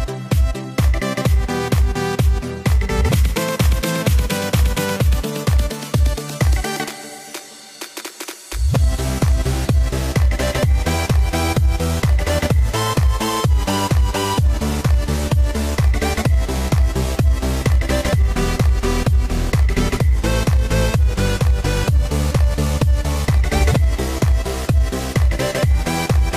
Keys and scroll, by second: 0.3 alt+super+z, 0.6 alt+super+z, 0.9 alt+super+z, 21.5 super+t.